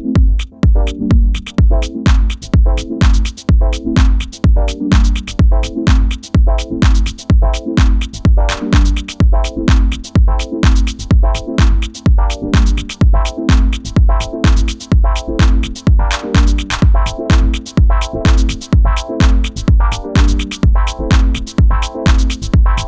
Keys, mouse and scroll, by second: 0.4 ctrl+z, 2.5 ctrl+z, 4.4 z, 5.9 b, 10.2 ctrl+z, 13.0 z, 13.8-14.8 middle drag, 15.8-22.6 middle drag, 22.6 click.